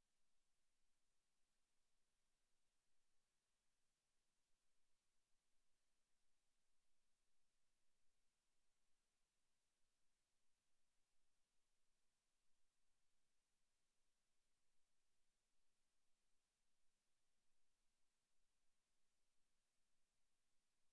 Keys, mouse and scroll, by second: 1.6 middle click, 2.3 z, 2.8 scroll down 3, 3.1 shift+middle click, 4.2 x, 5.1 right click, 5.6 right click, 6.2 right click, 7.3 shift+s, 9.2 middle click, 10.1 KP_7, 10.7 space, 16.6 KP_5, 17.4 scroll up 2, 18.2-18.6 shift+scroll up 5, 20.0 r.